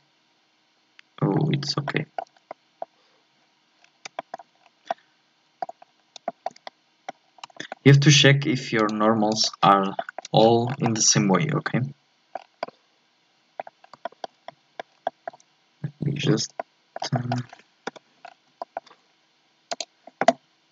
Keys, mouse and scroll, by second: 1.6 scroll up 1, 1.8 shift+middle click, 2.3 scroll up 1, 2.5-3.7 middle drag, 3.7-4.2 scroll down 1, 4.2 shift+middle click, 4.6-4.9 scroll down 1, 4.9 middle click, 5.8-6.2 scroll up 4, 6.2-7.3 shift+middle drag, 7.3 scroll up 1, 7.5-8.8 shift+middle drag, 9.3 click, 9.8 scroll down 1, 10.0 shift+middle click, 10.2 scroll up 1, 10.4-10.9 scroll down 8, 10.9-12.3 middle drag, 12.3-12.6 scroll up 6, 12.6-13.8 middle drag, 13.8-14.5 scroll up 3, 14.0 shift+middle click, 14.5 middle click, 14.9 scroll down 1, 15.1-17.4 shift+middle drag, 17.4-17.8 scroll down 2, 17.8 KP_7, 18.2 scroll up 4, 18.6-19.7 shift+middle drag.